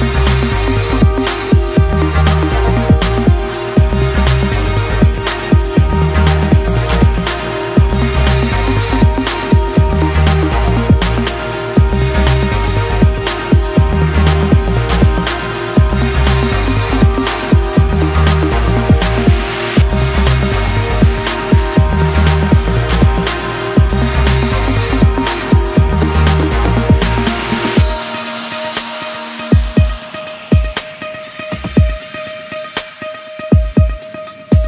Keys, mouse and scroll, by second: 0.2-0.8 scroll down 21, 0.8 click, 0.9 click, 1.4 click, 1.7-2.2 scroll down 28, 2.2-2.8 drag, 3.6 click, 4.2 shift+middle click, 4.3 scroll up 2, 4.4-19.6 typing, 5.1 middle click, 5.2-5.6 scroll up 4, 6.2 click, 6.6 middle click, 7.2-7.8 middle drag, 8.0-8.3 shift+middle drag, 9.0 shift+middle click, 9.0 scroll up 1, 9.5 scroll up 1, 9.6 click, 10.5 click, 12.6 shift+middle click, 13.5 click, 13.7 shift+click, 13.8 middle click, 14.1 middle click, 14.7 scroll down 1, 14.8 middle click, 15.4 middle click, 15.5 click, 15.9 alt+click, 16.2 shift+middle click, 16.3 scroll up 2, 18.0 shift+middle click, 19.0 alt+click, 19.4 shift+middle click, 19.8 scroll down 2, 19.8-20.5 shift+middle drag, 20.5 ctrl+r, 21.0-21.9 typing, 21.1 alt+drag, 22.3 middle click, 22.5 drag, 22.6 middle click, 23.1 drag, 23.1-23.6 middle drag, 23.6 shift+click, 23.6 middle click, 23.7-28.7 typing, 23.9 middle drag, 24.0 scroll up 1, 24.1 middle click, 24.3 shift+drag, 24.4 shift+click, 24.5 shift+click, 24.8 middle click, 25.1 middle click, 25.7 shift+click, 25.9 middle drag, 26.1 click, 26.2 middle drag, 26.4 shift+click, 26.6 middle drag, 26.8 shift+drag, 27.1 middle drag, 27.3 shift+click, 27.5 middle click, 27.8 middle click, 28.0 alt+shift+click, 28.1 middle click, 28.5 scroll up 9, 28.6 middle click, 29.2 scroll down 5, 29.2 middle drag, 29.4-29.8 scroll up 1, 29.8 middle click, 29.9-31.8 typing, 30.1 shift+middle click, 30.2-30.6 scroll up 1, 32.3-32.7 shift+middle drag, 32.7 scroll up 1, 32.9-33.5 middle drag, 33.6 shift+drag, 33.7 middle click, 33.9 v, 34.2 shift+click, 34.4 g.